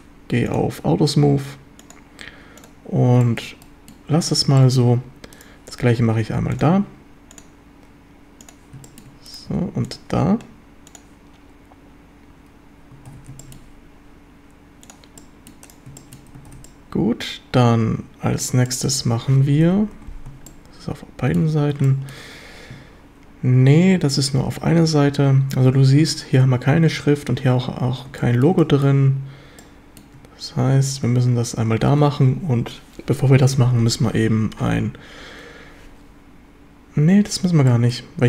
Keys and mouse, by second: 1.8 click, 2.6 click, 3.2 shift+middle drag, 3.6 middle drag, 3.9 drag, 4.6 shift+middle drag, 7.4 click, 8.4 click, 8.9 shift+middle drag, 9.3 click, 9.5 q, 10.9 click, 13.2 ctrl+s, 13.4 shift+drag, 14.9 click, 15.2-15.5 middle drag, 16.0 shift+middle click, 16.5 ctrl+s, 16.7-18.5 drag, 18.7 shift+click, 19.6 KP_7, 19.9 z, 20.5-21.4 shift+drag, 21.9 shift+click, 28.3 shift+middle drag, 28.7 shift+middle drag, 29.6-30.0 shift+middle drag, 37.7 shift+middle drag.